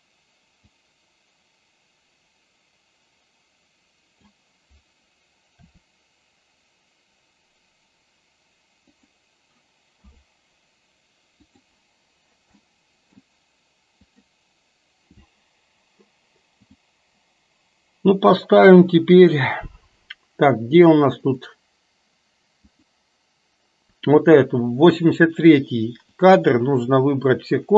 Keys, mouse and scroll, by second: 0.7-4.3 drag, 5.6 r, 10.0 i, 12.7 middle click, 14.2 click, 16.7 click, 21.3 click, 22.7 click.